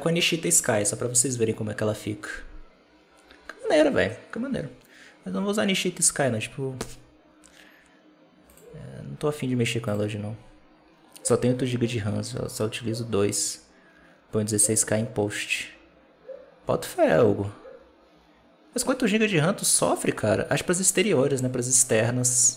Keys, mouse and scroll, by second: 8.4 click, 9.7 click.